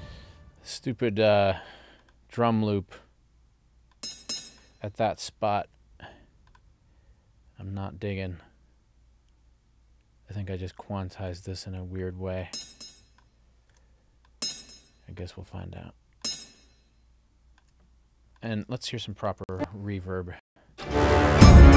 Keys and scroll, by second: 19.4 ctrl+alt+l, 20.4 space.